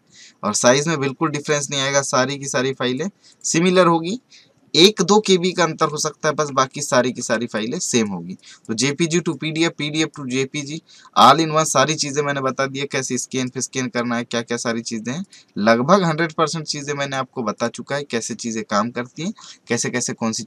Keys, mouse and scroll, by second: 6.5 Left, 7.2 Right, 7.5-10.3 drag, 10.3 right click, 11.2 click.